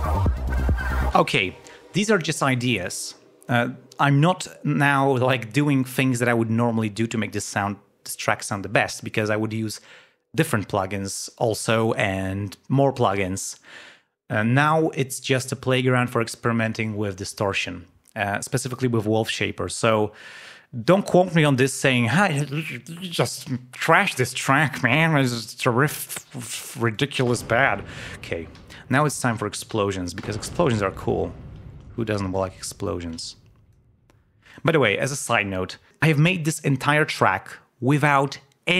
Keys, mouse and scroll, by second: 0.3 ctrl+scroll up 2, 1.0 space, 27.4 space, 28.5 g, 28.9 click, 30.1 l, 31.2 ctrl+scroll up 2, 33.1 space, 33.2 click.